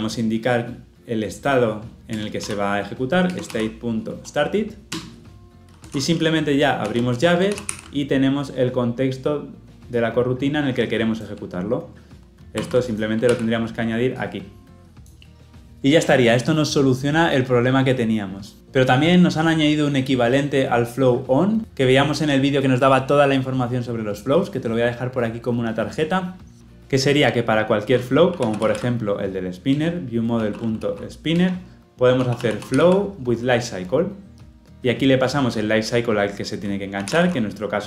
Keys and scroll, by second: 7.4 ctrl+alt+l, 7.6 ctrl+alt+o, 12.4 ctrl+c, 13.3 ctrl+v, 29.7 Return, 30.5 Return, 34.6 ctrl+p.